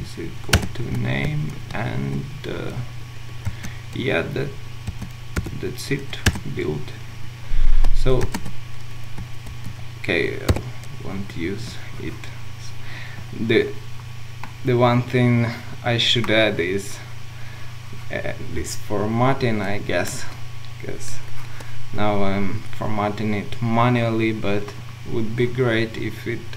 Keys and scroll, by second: 0.5 Return, 6.3 Return, 8.2 Return, 9.5 ctrl+z.